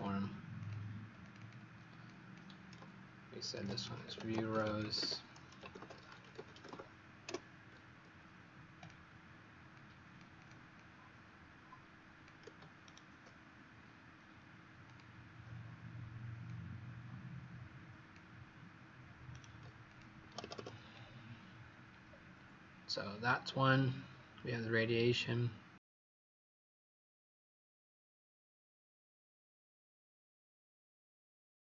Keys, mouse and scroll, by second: 0.0-0.3 typing, 0.5 click, 1.1 click, 1.3 click, 1.9 click, 3.3-6.9 typing, 8.7 click, 10.3 click, 10.7 click, 12.7 shift+right click, 14.7 click, 19.2 right click, 19.8 click, 20.1 Escape, 20.9 Escape, 22.0-24.7 scroll down 1, 27.5 scroll up 2.